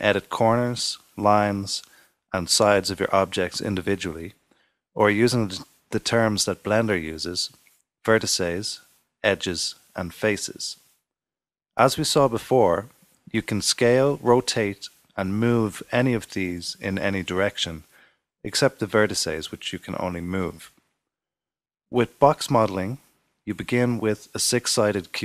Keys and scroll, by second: 23.0 super+z.